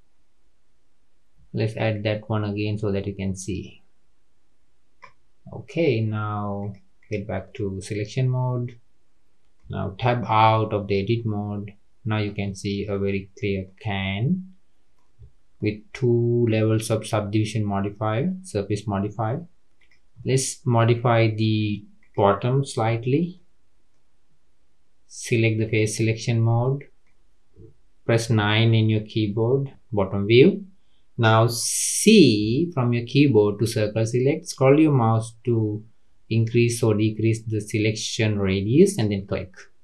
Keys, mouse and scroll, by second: 2.3-5.0 drag, 6.6 click, 7.4-10.0 middle drag, 10.0 Tab, 10.5-12.6 middle drag, 12.6-12.9 scroll down 2, 12.9-15.1 middle drag, 15.1-15.5 scroll up 2, 15.5-16.7 middle drag, 16.7 scroll down 1, 16.8-19.7 middle drag, 19.7 click, 20.1 scroll up 1, 20.2-21.9 middle drag, 21.9 click, 22.9 Tab, 23.3 middle click, 23.9-25.2 scroll up 1, 25.2-25.7 scroll up 1, 25.7 click, 26.2-26.6 scroll up 1, 26.6-28.2 middle drag, 28.2 KP_9, 32.4 c.